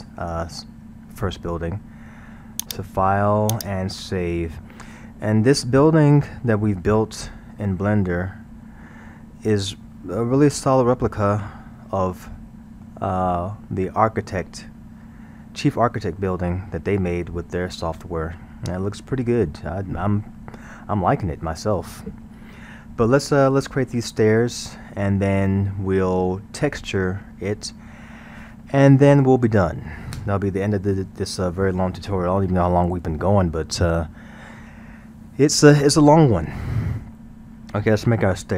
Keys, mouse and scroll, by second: 0.6-2.7 middle drag, 2.7-5.0 drag, 5.0-8.0 middle drag, 10.6-15.4 middle drag, 16.2-17.4 middle drag, 17.4-17.8 scroll, 17.9-21.7 middle drag, 21.9-24.9 middle drag, 37.2-38.5 middle drag.